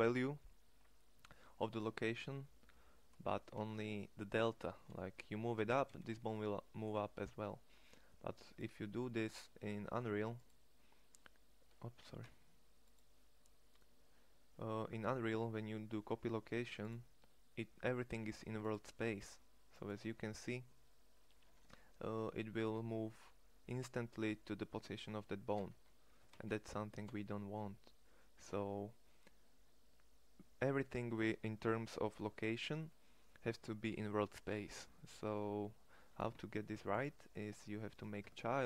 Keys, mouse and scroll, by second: 2.9 g, 4.9 g, 25.6 g, 37.9 Tab.